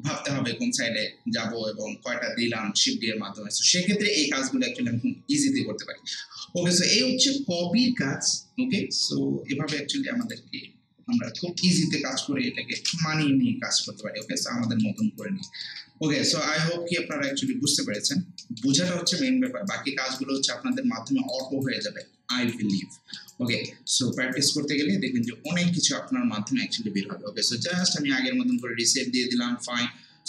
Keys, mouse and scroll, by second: 10.2 click, 11.1 ctrl+z, 12.8 ctrl+z, 13.4 scroll down 1, 13.8 scroll up 1, 13.9 alt+middle click, 14.2 alt+right click, 14.7 alt+middle click, 15.0 alt+right click, 15.5 alt+middle click, 16.2 ctrl+z, 17.1 right click, 17.5 alt+click, 18.0 alt+right click, 18.4 alt+middle click, 18.9 alt+right click, 19.3 alt+click, 19.7 alt+right click, 20.4 alt+middle click, 20.7 alt+click, 20.7 k, 21.4 alt+right click, 21.8 alt+middle click, 22.7 alt+middle click, 23.3 alt+right click, 23.7 alt+scroll down 1, 24.1 alt+right click, 24.8 alt+middle click, 25.3 alt+right click, 27.7 click.